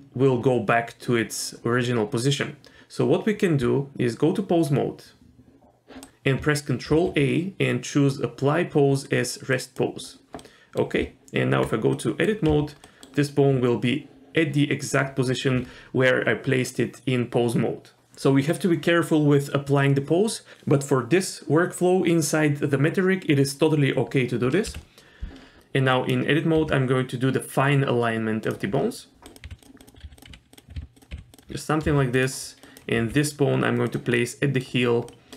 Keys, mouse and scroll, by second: 3.6 Tab, 4.8 Tab, 6.9 ctrl+a, 10.4-10.8 middle drag, 11.0 Tab, 12.0 middle click, 12.5 z, 12.8 middle click, 24.7 KP_1, 25.6 g, 25.9 click, 26.6 g, 28.8 scroll up 1, 29.3 click, 29.4-31.8 typing, 29.8 click, 32.6 click, 33.0 g, 34.2 middle click, 34.8 scroll up 1, 35.1 middle click.